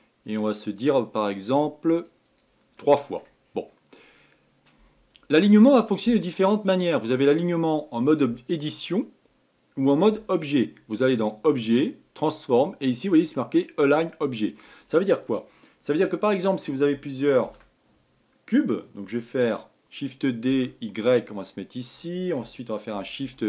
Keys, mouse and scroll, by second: 0.6-2.8 drag, 2.8 middle click, 3.4-4.7 scroll up 3, 6.5-9.6 middle drag, 11.1-14.3 drag, 14.8-16.0 scroll down 4, 16.0-17.4 shift+middle drag, 17.4 shift+d, 22.9 shift+r, 23.2 shift+r.